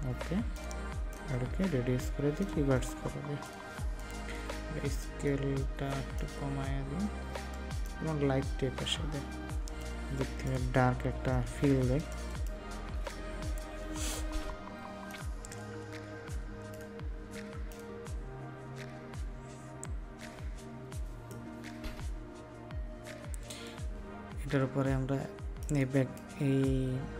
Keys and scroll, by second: 11.6 ctrl+space.